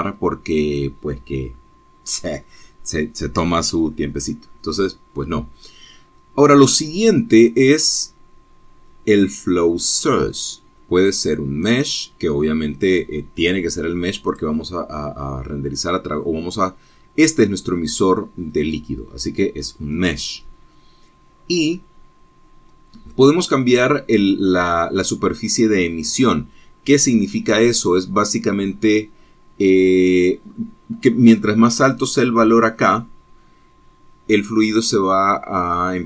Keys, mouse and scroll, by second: 8.7 right click, 9.4-10.0 scroll down 1, 12.9 right click, 15.5 right click, 24.1-24.5 scroll down 2.